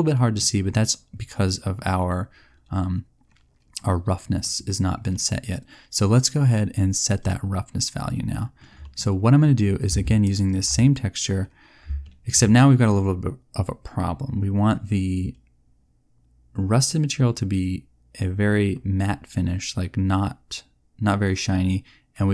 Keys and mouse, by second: 0.2-1.4 middle drag.